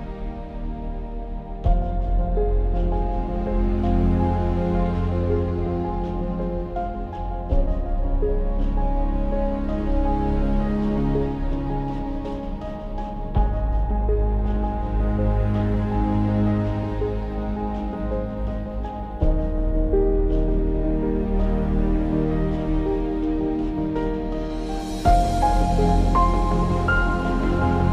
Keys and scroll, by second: 4.0 KP_1, 12.4-15.3 typing, 18.5 KP_0.